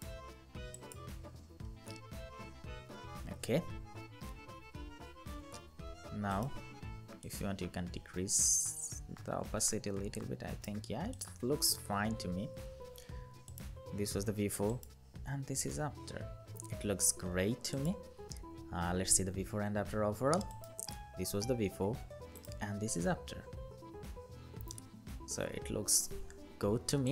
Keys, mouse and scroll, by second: 3.2 ctrl+0, 4.3 ctrl+-, 11.7 ctrl+-, 18.7-19.3 scroll down 1, 20.3 alt+click, 22.1 alt+click, 26.0-27.1 scroll up 1.